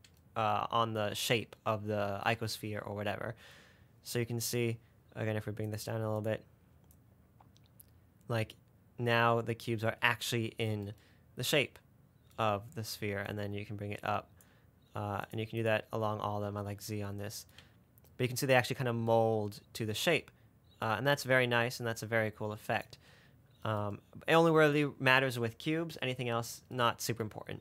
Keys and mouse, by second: 5.9 click, 7.4-10.0 drag, 13.7 click, 16.9-18.9 middle drag, 21.1 click, 23.2-27.3 middle drag.